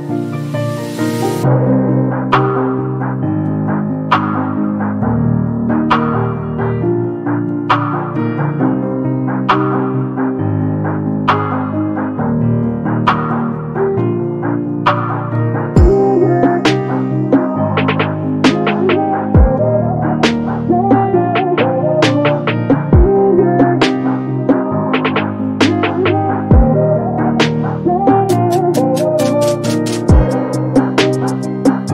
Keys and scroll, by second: 6.2 9, 6.7 0, 6.7 Return.